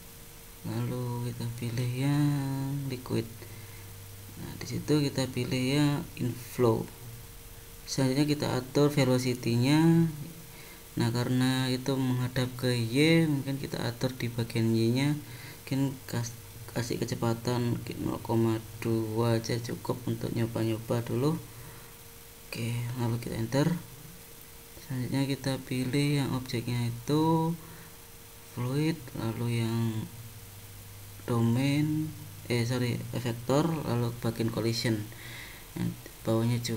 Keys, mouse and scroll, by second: 1.0 click, 1.9 click, 3.8-4.5 scroll down 4, 4.5 click, 6.4-6.9 scroll down 4, 9.2 click, 15.3 click, 25.1 click, 26.9 click, 28.0 click, 31.2 click, 33.7 click.